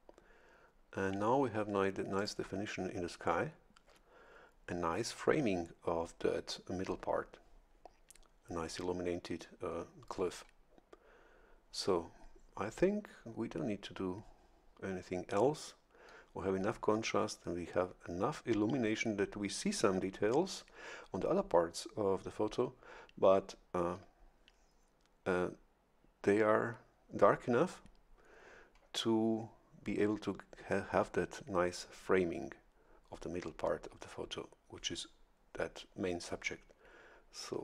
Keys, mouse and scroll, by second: 2.2 click.